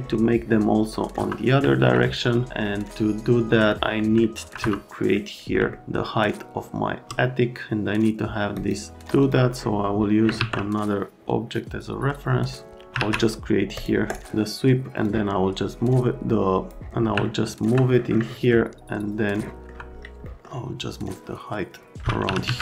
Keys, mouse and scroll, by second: 0.9 middle click, 1.1 F3, 1.6 alt+right click, 3.7 middle click, 3.8 right click, 4.2 alt+right click, 4.6 F3, 4.9 middle click, 5.7 alt+middle click, 8.5 shift+middle click, 9.2 click, 10.4 alt+1, 12.9 alt+1, 13.7 click, 15.0 click, 17.2 alt+middle click, 22.0-22.6 typing.